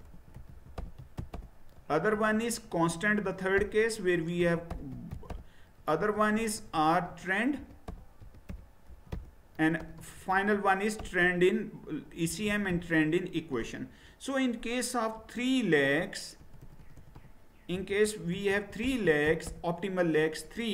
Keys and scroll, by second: 0.0-13.2 typing, 16.4-19.9 typing.